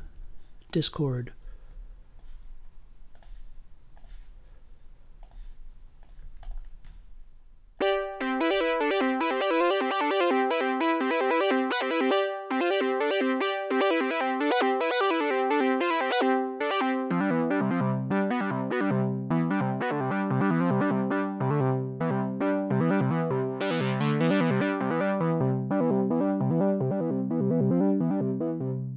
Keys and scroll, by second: 15.7-16.6 typing.